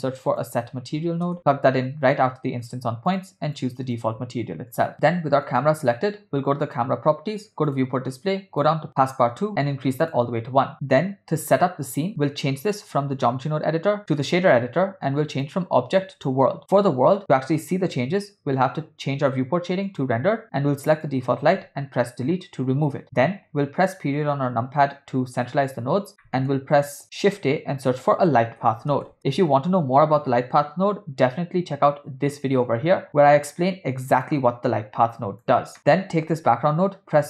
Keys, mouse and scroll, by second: 3.1 click, 3.5 click, 3.9 click, 5.5 click, 6.7 click, 7.7 click, 8.1 click, 9.5 click, 12.8-14.4 drag, 15.3-16.4 drag, 20.2 click, 20.9 click, 22.2 Delete, 24.0 KP_Decimal, 26.2 middle click, 27.3 shift+a, 30.3 BackSpace, 35.1 click, 35.8 shift+middle click, 36.3 shift+d.